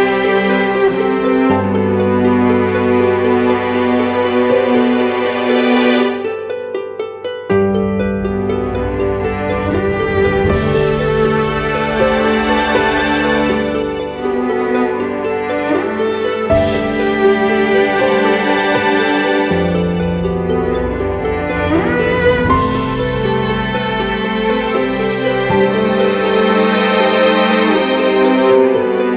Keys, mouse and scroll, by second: 1.6 alt+shift+click, 4.9 alt+shift+click, 8.4 Return, 19.3 double click, 26.9 double click, 27.9-28.5 typing, 29.0 double click.